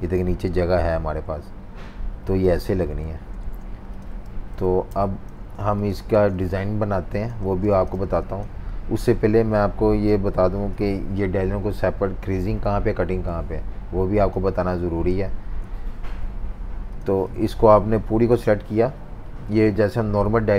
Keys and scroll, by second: 2.7 super+z, 3.4 super+z, 4.5-7.6 typing, 4.9 super+-, 10.7 F18, 15.9 F19.